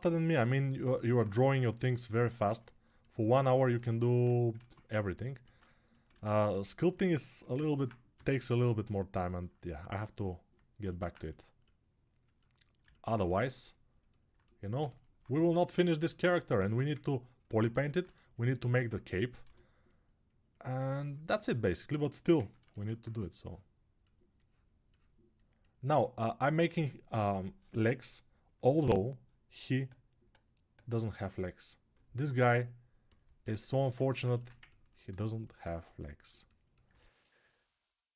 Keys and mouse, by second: 1.5-5.9 drag, 4.3 ctrl+Tab, 5.9 ctrl+r, 7.9 g, 9.8-30.9 alt+drag, 19.2 g, 30.9-35.1 right drag, 35.1-38.1 alt+drag, 35.4 2.